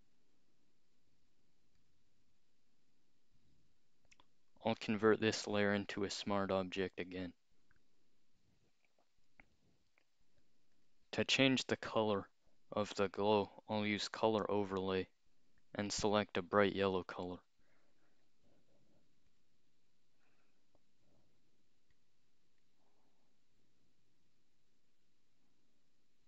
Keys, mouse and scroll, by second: 1.8 click, 2.4-3.0 scroll up 2, 3.4 click, 4.8 right click, 5.6 click, 6.0 scroll up 2, 10.8 click, 13.8 click, 15.8 click, 18.2 click, 19.3 click, 20.2 click, 21.9 click, 22.6-26.2 drag.